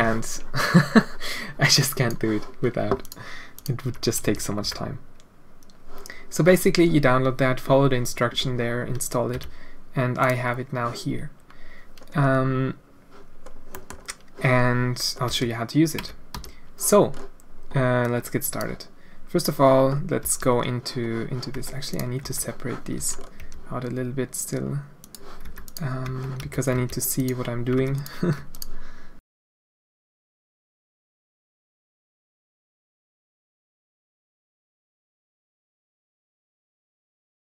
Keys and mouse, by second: 3.6 click, 3.8 Tab, 4.2 a, 4.6 Tab, 9.3 n, 13.8 click, 15.3 a, 16.0 Tab, 16.3 a, 18.2 click, 20.2 a, 21.6 Tab, 22.2 Tab, 23.0 a, 23.4 g, 25.4 Tab, 25.6 click, 26.2 Tab, 26.4 a, 26.7 g, 27.8 Tab, 27.9 click, 29.2 click, 29.4-37.4 typing, 29.5 Tab, 29.7 click, 29.9 Tab, 30.0 Tab, 30.6 click, 30.7 shift+click, 30.8 Tab, 31.0 click, 31.5 Tab, 31.8 Tab, 32.0 Tab, 32.7 Tab, 33.1 Tab, 33.6 Tab, 33.7 Tab, 33.9 Tab, 34.1 Tab, 34.2 Tab, 34.4 ctrl+z, 34.5 ctrl+z, 34.6 Tab, 34.9 drag, 35.3 Tab, 35.5 Tab, 36.1 Tab, 36.1 Tab, 36.3 Tab, 36.5 Tab, 36.7 Tab, 37.1 Tab.